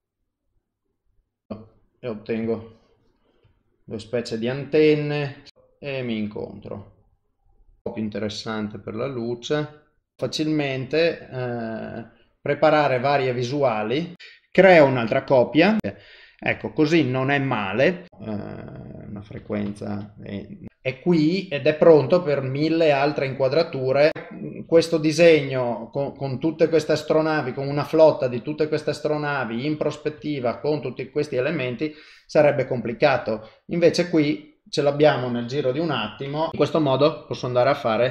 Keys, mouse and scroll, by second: 1.5 e, 2.0 middle click, 2.6 ctrl+middle click, 3.2 middle click, 3.6 middle click, 5.5 e, 6.3 middle click, 10.2 ctrl+middle click, 20.7 middle click, 22.8 ctrl+middle click, 23.4 middle click, 24.1 shift+middle click, 24.8 ctrl+middle click, 25.4 alt+middle click, 25.9 alt+middle click, 26.1 middle click, 27.1 shift+middle click, 27.8 ctrl+middle click, 29.3 middle click, 30.2 shift+middle click, 31.9 click, 34.1 middle click.